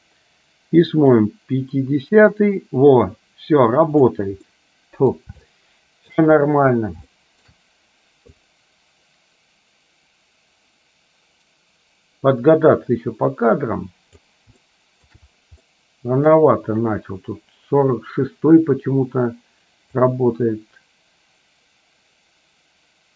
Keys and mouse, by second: 1.2-4.2 drag, 4.6 middle click, 5.5 shift+middle click, 7.4 shift+middle click, 8.5-14.4 drag, 14.7 shift+middle click, 15.7 middle click, 20.2-23.1 drag.